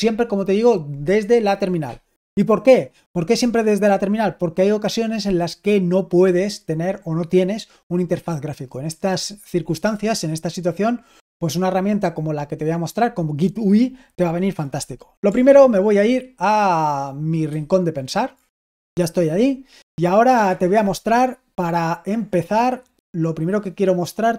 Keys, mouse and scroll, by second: 17.4 ctrl+1.